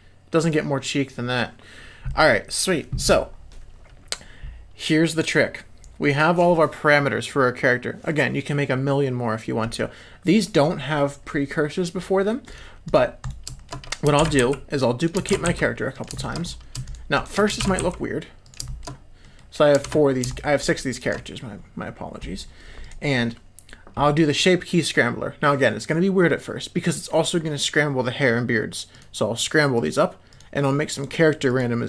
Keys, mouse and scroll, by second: 2.1 middle click, 12.8 click, 13.2 click, 13.5 shift+middle click, 14.4 shift+d, 15.5 shift+d, 16.1 shift+middle click, 16.8 shift+click, 17.1 shift+click, 17.9 shift+d, 18.6 shift+middle drag, 19.2 middle click, 20.3 shift+click, 20.6 shift+click, 20.9 shift+click, 29.7 click, 30.3 click, 30.9 click, 31.4 click.